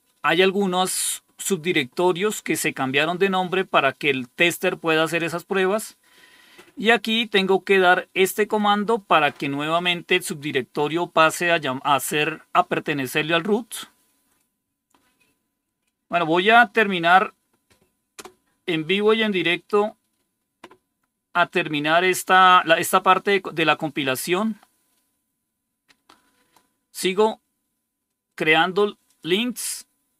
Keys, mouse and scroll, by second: 6.0 click, 13.2 right click, 14.2 click, 15.5 right click, 16.8 click, 18.0 Return, 24.1 click, 27.9 right click, 29.0 click.